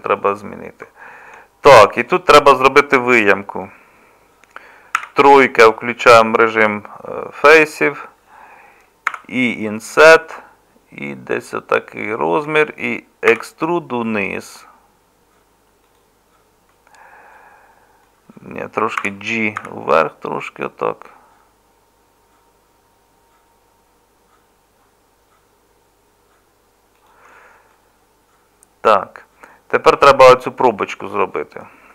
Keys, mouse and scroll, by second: 5.0 3, 13.3 e, 19.0 g.